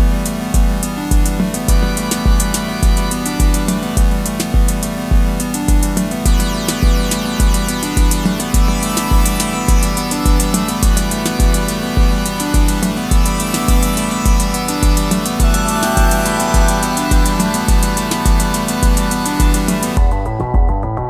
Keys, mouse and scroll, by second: 1.3 ctrl+t, 2.4 alt+shift+click, 6.8 alt+shift+click, 11.2 Return, 11.4 Up, 19.9 alt+BackSpace.